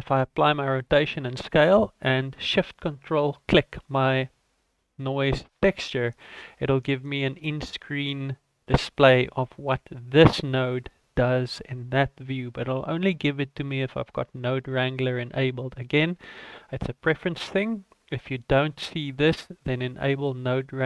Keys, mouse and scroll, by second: 3.8 ctrl+shift+click, 4.9 middle click.